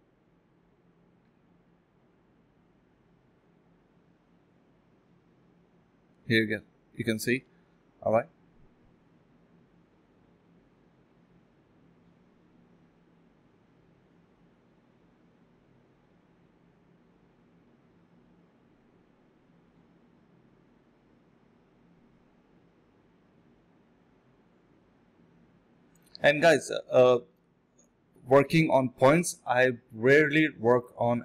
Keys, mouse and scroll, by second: 0.1 ctrl+shift+click, 3.3 d, 7.6 alt+click, 8.1 alt+click, 9.6 alt+click, 10.5 alt+click, 11.4 ctrl+click, 12.0 ctrl+shift+click, 12.6 ctrl+z, 13.1 ctrl+shift+x, 14.4 alt+click, 14.6 alt+click, 14.7 alt+click, 15.3 ctrl+b, 15.5 double click, 16.0 typing, 16.8 ctrl+click, 18.3 alt+click, 19.1 alt+click, 19.5 alt+click, 19.8 ctrl+click, 20.8-21.9 typing, 22.0 ctrl+shift+x, 22.6 alt+click, 23.4 ctrl+z, 25.2 d, 25.4 ctrl+shift+click, 25.8 f, 26.1 alt+click, 26.3 ctrl+shift+click, 27.2 alt+click, 27.5 alt+click, 27.6 alt+double click, 28.0-28.4 typing, 28.0 alt+click, 28.2 alt+click, 29.4 alt+click, 29.6 alt+click, 30.2 alt+click.